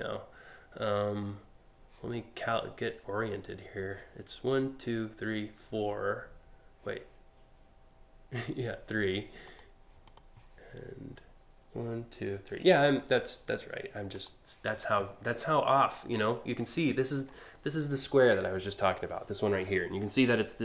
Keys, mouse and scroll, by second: 9.0 click, 9.7 click, 13.8 click, 16.5 scroll up 1, 16.9-17.2 scroll down 2.